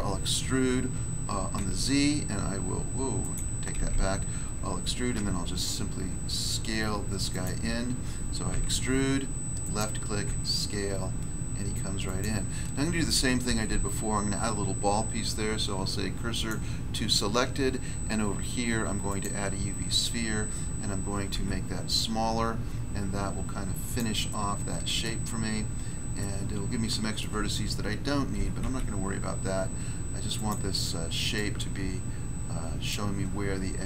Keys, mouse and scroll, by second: 1.5 z, 3.2 click, 3.3 click, 3.7 ctrl+z, 5.1 s, 7.3 click, 7.4 click, 8.4 e, 9.6 click, 9.7 click, 10.2 s, 12.0 click, 12.1 click, 13.4 s, 16.3 click, 16.4 click, 19.0 click, 19.2 click, 21.3 s, 23.8 click, 23.9 click, 24.2 middle click, 25.0 middle click, 25.3 scroll up 1, 26.1 shift+middle click, 28.3 s, 28.6 z, 30.3 click, 30.4 click, 31.3 click, 32.8 click, 33.2 scroll down 1.